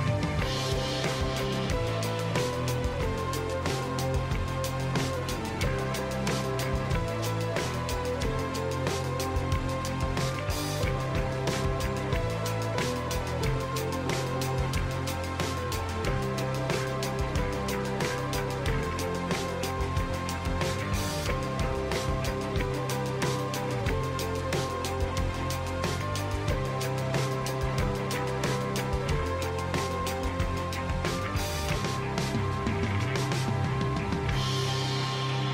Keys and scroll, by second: 8.8 ctrl+e.